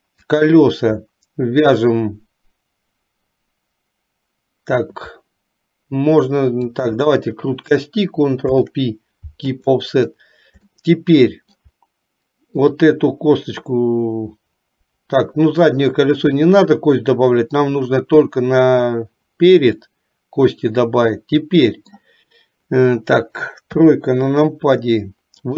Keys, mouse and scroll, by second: 6.8 shift+click, 8.6 ctrl+p, 10.9 shift+middle click, 16.4-17.9 middle drag, 20.0-22.0 middle drag, 23.8 KP_3.